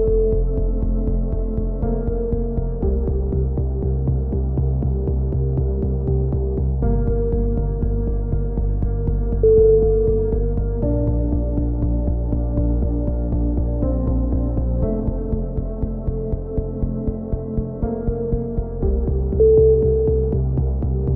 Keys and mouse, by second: 0.0 right click, 1.2 z, 1.9 right click, 3.0-5.5 middle drag, 8.6-10.2 right drag, 11.2 middle click, 11.6-13.0 drag, 13.0 middle click, 14.7 middle click, 15.7-17.9 right drag, 18.1 right click, 18.7 click, 18.9 click, 19.9-21.1 right drag.